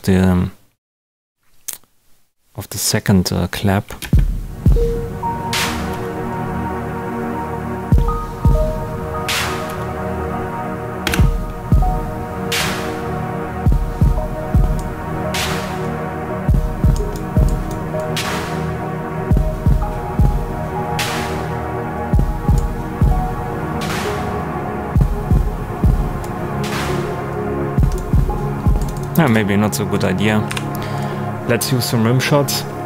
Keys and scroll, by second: 4.0 space, 5.9 space, 7.7 space, 9.6 space, 11.0 space, 29.2 space, 30.4 Delete.